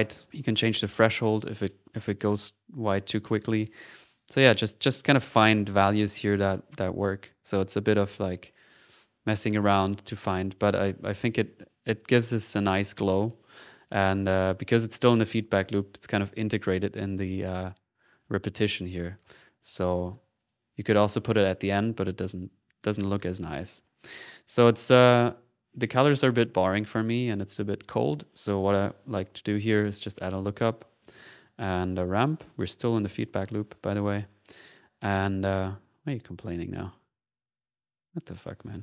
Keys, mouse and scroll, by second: 0.3 click, 2.6-5.3 drag, 5.4 typing, 6.4 click, 9.5 click, 10.5 click, 11.6 click, 12.0 click, 12.5 middle click, 13.2 click, 15.4-17.7 middle drag, 19.8 middle click, 20.4 middle click, 21.1 middle click, 21.8 right click, 22.1 right click, 23.0 click, 23.3 click, 23.8 click, 24.0 middle click, 24.7 click, 28.0 click, 28.4 click, 28.9-30.0 typing, 31.0 click, 31.6 right click, 32.0-32.7 typing, 32.9 click, 33.3 click, 33.8 click, 35.1 click, 35.4 click, 35.7 click, 36.1 click, 36.8 middle click, 38.4 ctrl+click.